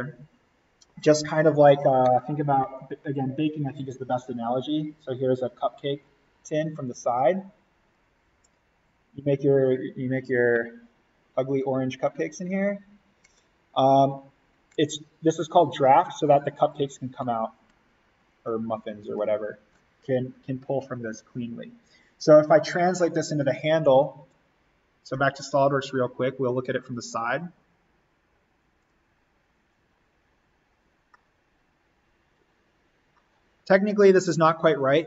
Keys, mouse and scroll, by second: 10.5 click, 23.0 click, 27.1 click, 29.2 click, 31.1-32.6 middle drag, 32.6-33.1 scroll down 1, 33.1-35.0 middle drag.